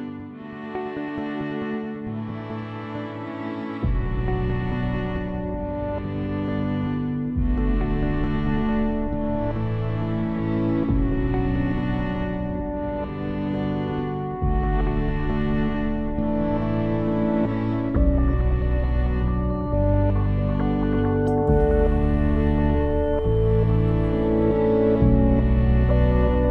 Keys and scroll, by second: 3.6 8, 3.9 Return, 7.4 6, 7.7 Return, 10.2 7, 10.6 Return, 22.4 ctrl+s.